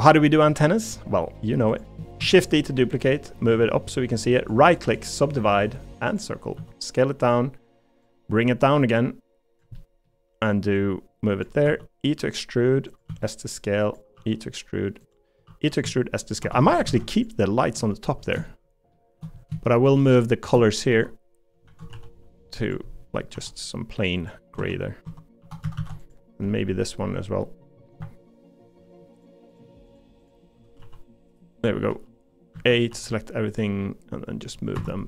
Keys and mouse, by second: 0.5 middle click, 2.2 shift+d, 6.5 s, 9.5 click, 9.7 middle click, 10.8 click, 11.6 e, 13.1 s, 14.1 e, 15.4-16.8 typing, 17.1 alt+click, 18.5 shift+middle click, 19.6 middle click, 20.9 g, 21.6 a, 21.9 g, 23.3 g, 24.6 Tab, 25.0 Tab, 25.4 3, 25.6 a, 25.8 a, 26.6 middle click, 27.4 middle click, 30.8 g, 31.9 g, 32.5 a, 32.9 g.